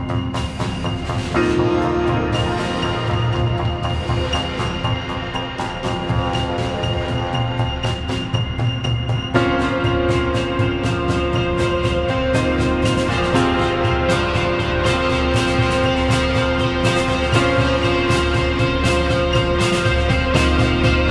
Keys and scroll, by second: 1.2 ctrl+k, 2.1 Escape, 7.2 c, 7.8 Escape, 12.9 c, 17.9 ctrl+z.